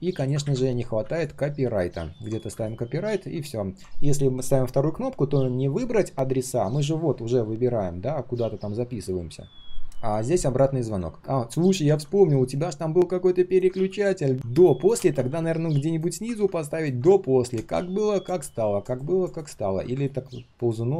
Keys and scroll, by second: 13.7 ctrl+z.